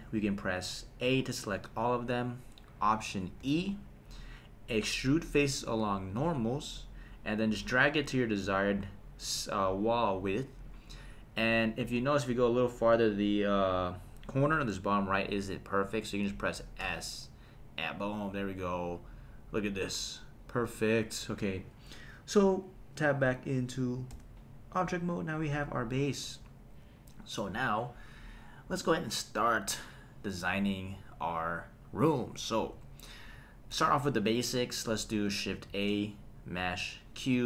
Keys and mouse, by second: 1.0 a, 3.4 alt+e, 16.8 s, 20.8 click, 21.6 click, 24.1 Tab, 32.6 KP_1, 35.7 shift+a.